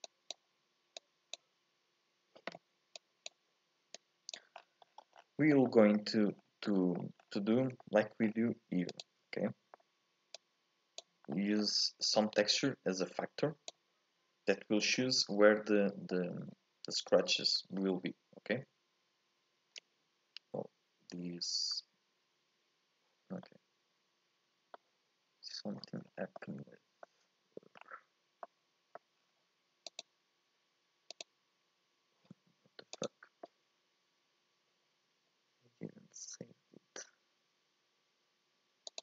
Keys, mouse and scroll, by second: 0.0 click, 1.0 click, 3.9 click, 4.6-5.6 scroll down 8, 5.6 middle click, 6.4 scroll up 2, 6.7 middle click, 7.2-7.8 scroll up 5, 7.8 middle click, 8.2-9.0 scroll up 3, 9.0 ctrl+shift+click, 9.5 middle click, 10.3-11.3 drag, 11.3-22.4 middle drag, 22.4 click, 23.5-26.0 middle drag, 26.0 scroll up 2, 26.5-27.9 middle drag, 27.9-28.5 scroll up 2, 28.5 middle click, 29.3-30.0 scroll up 4, 30.0 click, 33.1-36.1 drag.